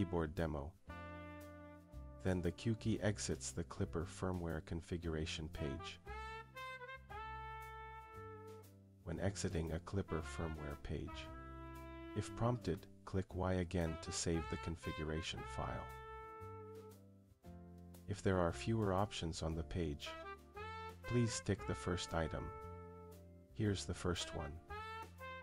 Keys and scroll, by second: 0.0-1.1 typing, 1.6 Return, 19.5 Return.